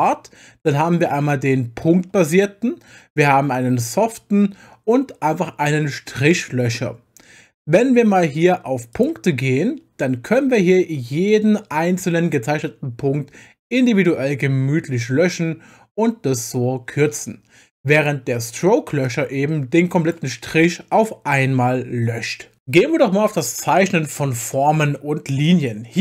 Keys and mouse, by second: 8.9 click, 10.5 click, 18.0 click, 19.0 click.